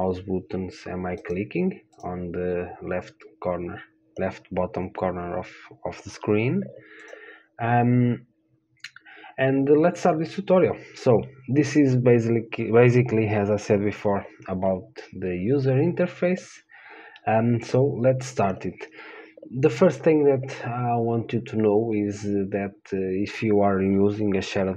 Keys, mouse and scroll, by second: 0.1-2.1 drag, 1.4-3.5 right drag, 2.2-4.2 drag, 7.3-18.7 drag.